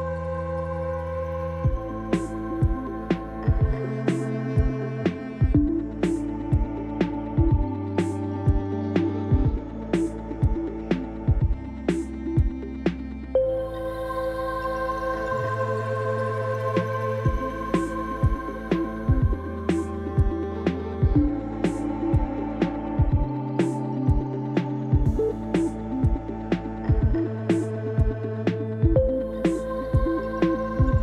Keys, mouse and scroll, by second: 1.8-3.5 scroll down 1, 16.5 KP_3, 19.3 g.